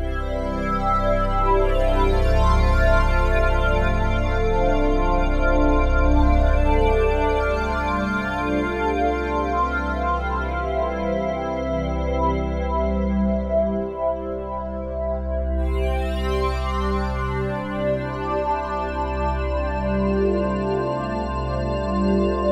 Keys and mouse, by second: 2.5-3.9 ctrl+alt+drag, 3.9 ctrl+s, 4.8-9.3 drag, 9.3 BackSpace, 10.6-11.3 typing, 12.4 typing, 13.5-14.6 typing, 13.8-14.9 drag, 16.0 click, 17.3 ctrl+alt+click, 17.7-18.9 alt+drag, 18.4-18.8 typing, 19.1-21.6 drag.